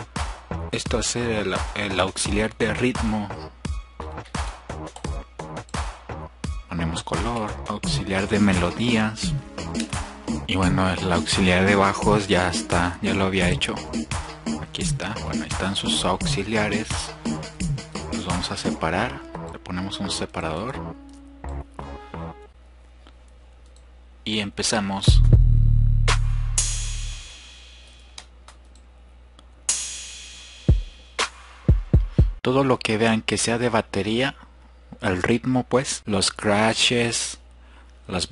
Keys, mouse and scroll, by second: 17.3 click, 19.7-20.6 scroll down 2, 20.6-21.5 scroll down 1, 21.5 click, 21.7-22.5 scroll down 2, 25.2-25.6 drag.